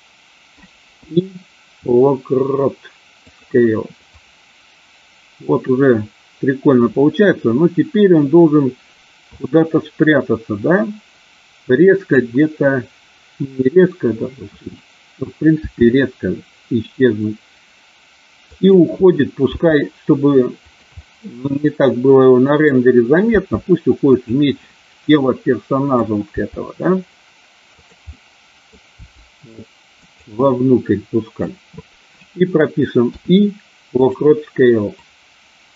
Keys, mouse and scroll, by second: 0.9 i, 4.0-12.2 drag, 15.5 s, 18.4 click, 19.4 g, 20.5 click, 21.1-22.7 middle drag, 23.2 g, 24.1 click, 24.7-25.9 middle drag, 26.3 g, 27.7 click, 28.2 middle click, 28.8 g, 29.9 click, 30.4 scroll up 1, 30.6 middle click, 33.0 i, 34.9-35.7 drag.